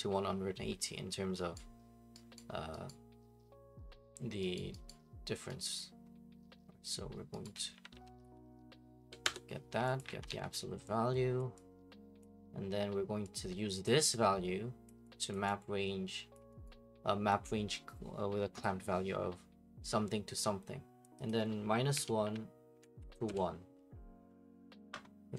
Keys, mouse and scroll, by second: 1.5 right click, 2.4 right click, 2.9 right click, 4.6 right click, 4.9 right click, 5.6 right click, 7.4 right click, 7.5-8.8 typing, 9.2 Return, 10.0 click, 10.1 ctrl+c, 10.3 ctrl+v, 11.4 click, 12.2 click, 13.8 click, 14.9 click, 15.3 click, 16.3 click, 16.7 right click, 16.9 middle click, 17.0 middle click, 18.6 click, 21.3 click, 21.9-23.5 typing, 22.7 Tab.